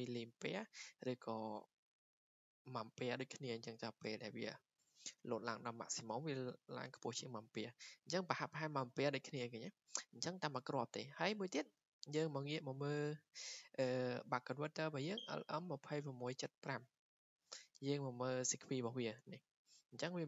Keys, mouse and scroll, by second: 11.3 click, 12.7 click, 19.4-20.2 drag.